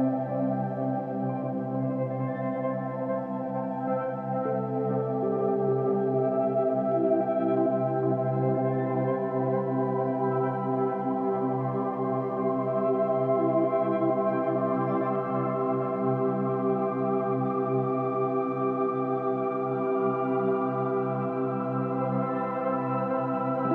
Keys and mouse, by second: 0.0-2.6 drag, 3.0 click, 4.0 click, 4.3 click, 5.5 click, 5.9 drag, 8.1 click, 10.5 click, 12.0 click, 12.9 click, 14.2 click, 14.5 click, 15.5-16.6 alt+shift+drag, 16.9-23.7 drag.